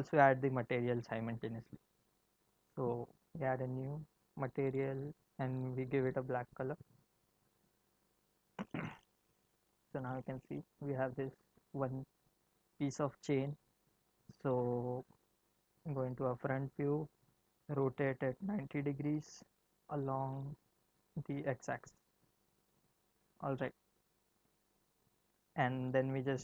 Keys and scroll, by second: 15.7 End, 17.8 r, 20.5 z.